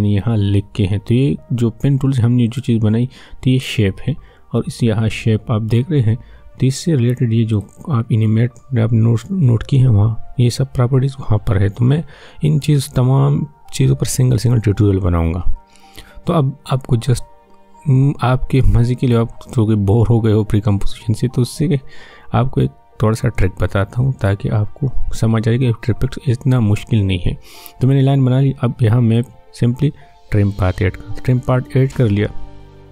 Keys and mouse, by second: 7.5 click, 19.0 click, 21.3-29.2 drag.